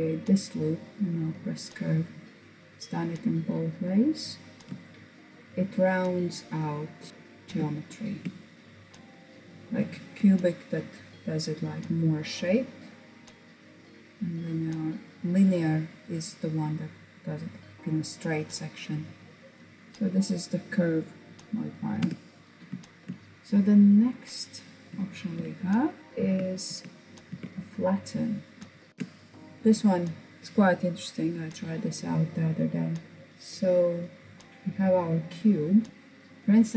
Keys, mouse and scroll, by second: 0.2 click, 0.9-1.2 scroll down 2, 1.2-3.4 middle drag, 3.4-3.9 scroll up 1, 3.9-5.3 shift+middle drag, 7.1 shift+middle click, 8.0-9.1 drag, 12.2-12.5 scroll down 1, 12.5-15.6 middle drag, 17.7-19.9 drag, 19.9 middle click, 21.0 Tab, 22.4 shift+middle click, 22.5-23.4 scroll up 1, 23.4 click, 24.0-25.3 shift+middle drag, 25.3 Tab, 26.0 Tab, 26.3 Tab, 27.1 click, 32.8-34.8 middle drag, 35.3 scroll up 2.